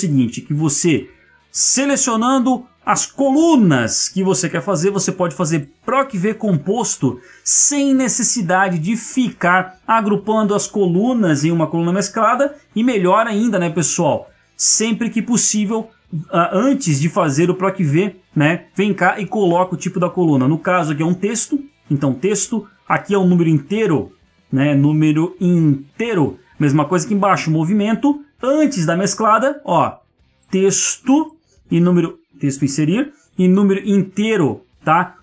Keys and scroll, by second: 3.3 ctrl+1, 12.7 Escape.